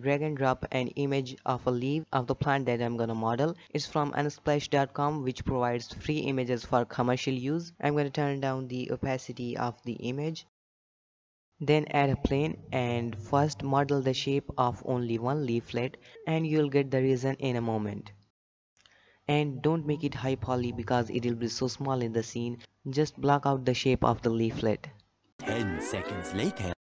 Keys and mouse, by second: 2.8 alt+g, 3.5 shift+middle drag, 3.9 g, 4.6 g, 7.1 click, 8.1 click, 8.7-10.5 drag, 11.2-11.5 shift+middle drag, 11.5 shift+a, 11.6 shift+a, 12.3 z, 12.6 shift+click, 13.0 g, 14.3 Tab, 14.4 shift+middle drag, 14.6 s, 14.6 s, 15.4 shift+middle click, 15.6 shift+middle click, 16.1 g, 16.8 g, 17.7 g, 19.0 g, 20.1 shift+click, 20.3 alt+a, 20.5 g, 21.2 shift+click, 21.3 shift+middle click, 21.3 shift+click, 21.4 shift+middle click, 21.5 e, 22.4 click, 22.6 g, 23.3 click, 23.4 g, 23.8 g, 24.6 shift+middle click, 25.0 r, 26.7 alt+a.